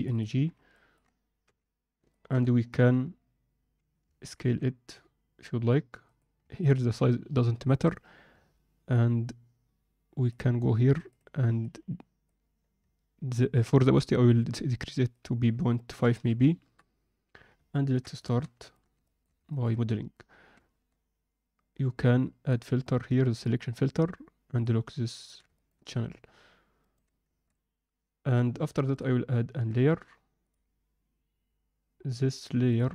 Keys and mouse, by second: 0.7 ctrl+middle click, 1.4 n, 2.1 ctrl+middle click, 4.3 s, 6.5 ctrl+middle drag, 11.1-12.2 drag, 15.2-16.6 drag, 17.7 ctrl+middle click, 18.1 shift+middle click, 18.6 ctrl+alt+middle drag, 19.0 alt+shift+middle click, 19.5 ctrl+middle click, 22.5-23.7 drag, 24.5 click, 25.1 ctrl+middle click, 25.5 ctrl+alt+middle drag, 26.7 shift+right click, 27.4 shift+a, 32.7-32.9 drag.